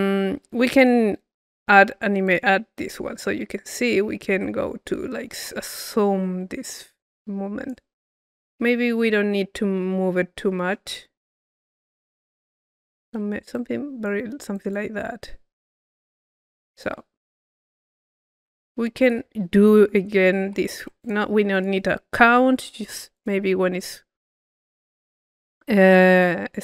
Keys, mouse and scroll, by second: 0.7-2.1 drag, 2.2 click, 3.2-8.8 drag, 8.8-13.5 middle drag, 13.5-15.8 drag, 16.4 click, 17.1-18.2 middle drag, 18.2-19.4 right drag, 21.0 click, 21.0 c, 21.5 click, 22.2 Delete, 23.1 click.